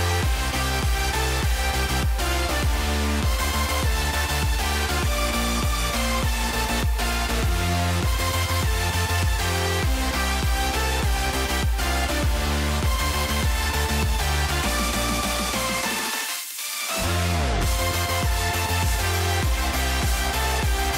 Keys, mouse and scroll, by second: 0.0 click, 0.5 click, 3.7 click, 4.0 click, 4.9 click, 7.7 ctrl+s, 10.8 click, 11.7-12.9 drag, 13.2-14.0 drag, 14.9 click, 18.8-19.8 drag, 20.7 ctrl+z.